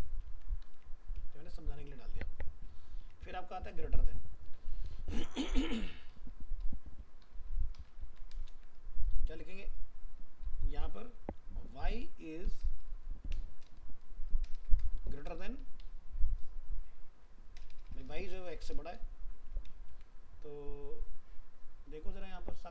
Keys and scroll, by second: 0.7 alt+Tab, 8.0 ctrl+c, 8.5 ctrl+v, 19.9 ctrl+s.